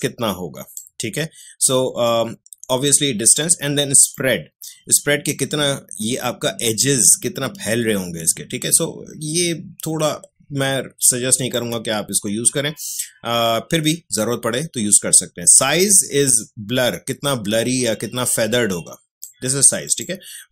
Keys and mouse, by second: 4.1-15.8 drag, 15.8-20.5 drag.